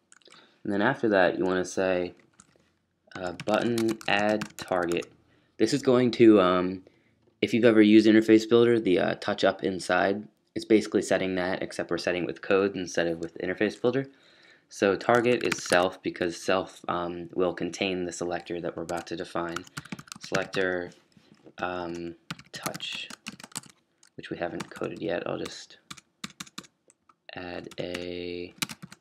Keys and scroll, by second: 2.1-5.2 typing, 6.8-7.9 typing, 14.9-16.1 typing, 18.5-24.0 typing, 25.8-29.0 typing.